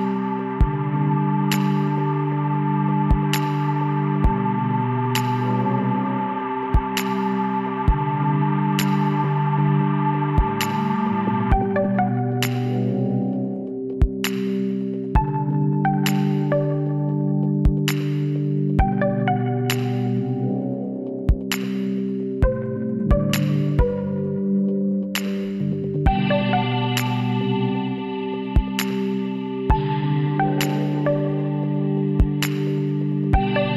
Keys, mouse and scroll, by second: 0.9 s, 6.1 KP_1, 6.7-8.0 middle drag, 8.0 z, 8.8 middle click, 9.1-10.6 middle drag, 10.8 b, 12.9-14.7 drag, 15.0-16.1 middle drag, 16.1 Tab, 17.2 z, 19.1 click, 19.7 Tab, 21.8 KP_1, 23.7 b, 26.6 click, 26.9 middle click, 27.1-30.7 drag, 27.8 z, 32.1 b.